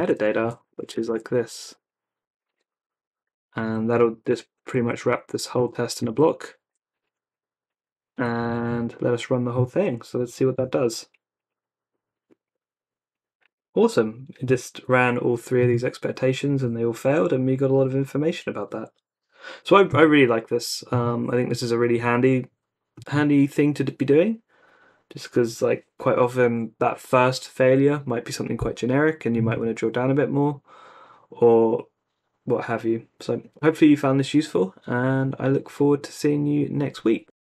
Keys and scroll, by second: 0.0-6.7 typing, 0.4 super+v, 3.2 Down, 3.4 Down, 3.6 Down, 3.7 Down, 4.3 Escape, 4.5 Up, 5.8 Up, 7.8 Down, 8.2 =, 8.4 super+s, 10.1 Up, 10.5 Return.